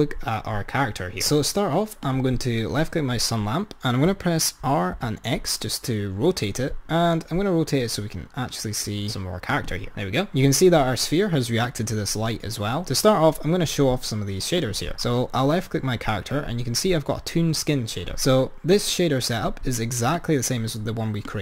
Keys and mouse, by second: 1.2 click, 2.1 click, 4.2 r, 11.6 click, 14.8 click, 18.8 click, 20.2 click, 21.3 click.